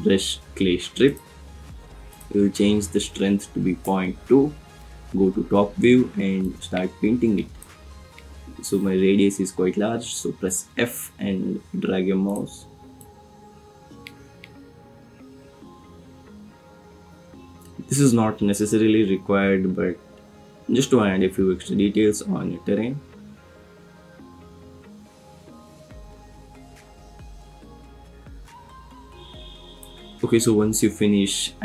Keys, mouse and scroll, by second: 1.1 click, 2.1-3.9 drag, 4.9 KP_7, 6.5 click, 10.4 f.